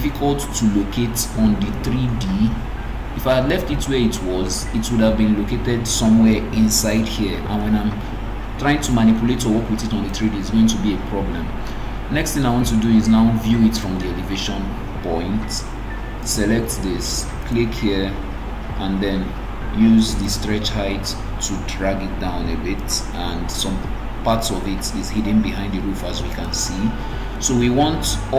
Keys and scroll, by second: 1.1 ctrl+v.